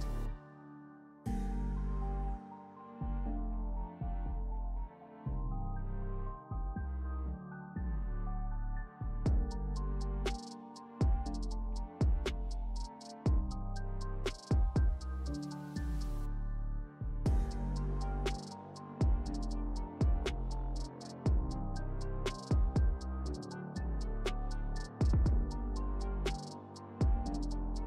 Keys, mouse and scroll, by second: 1.7 v, 3.0-5.4 alt+drag, 7.8-12.4 drag, 13.0-14.0 space, 14.7 click, 19.5-27.8 typing, 25.5 Return.